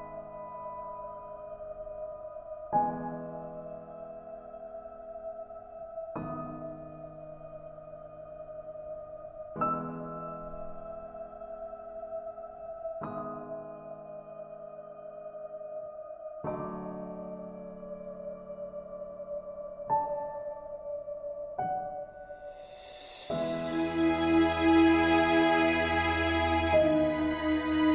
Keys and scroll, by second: 2.4 ctrl+g, 3.7 ctrl+space, 13.6 ctrl+a, 16.3 ctrl+d.